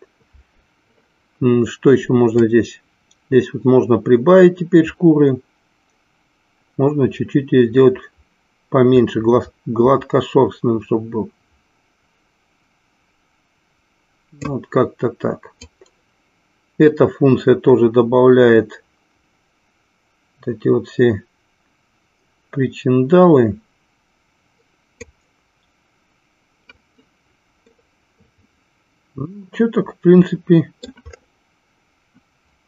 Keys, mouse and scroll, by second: 2.3-14.9 drag, 15.8-25.4 drag, 27.8-31.2 middle drag.